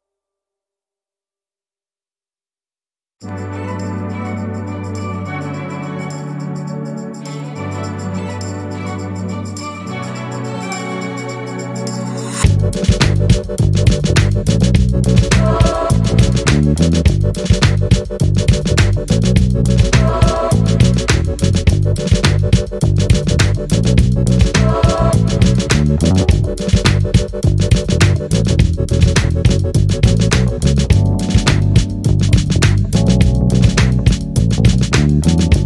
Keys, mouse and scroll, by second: 0.8 ctrl+d, 1.1-2.6 ctrl+drag, 3.2-5.2 ctrl+drag, 6.6 shift+click, 7.5 shift+click, 8.3-8.7 ctrl+shift+scroll down 2, 10.8 ctrl+d, 11.7-14.4 ctrl+drag, 15.4-16.4 shift+drag, 17.3 shift+click, 18.1-19.2 shift+drag, 19.7 shift+click, 20.6-22.0 shift+drag, 22.2 ctrl+d, 22.6-31.3 ctrl+drag, 33.0-34.0 shift+drag, 34.5 ctrl+shift+KP_Add.